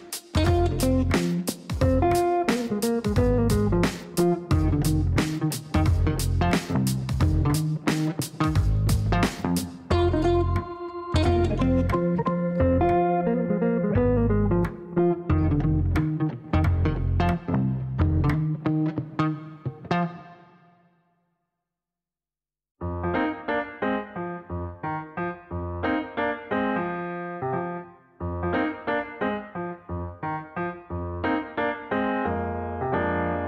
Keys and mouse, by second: 1.1 click, 3.8 click, 10.7 click, 11.6 click, 14.8 click, 15.8 click, 17.2 click, 19.8 click, 20.4 Up, 20.4 click, 21.0 click, 21.9-25.3 typing, 25.4 Down, 25.7 Down, 25.8 Down, 25.9 Down, 26.1 Down, 26.3 Down, 26.7 Return, 28.1 click, 29.3 click, 30.8 click.